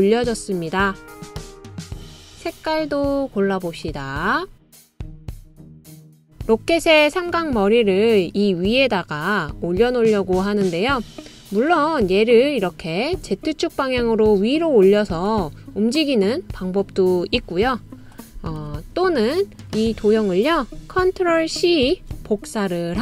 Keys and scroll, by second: 19.0 d, 22.3 super+c.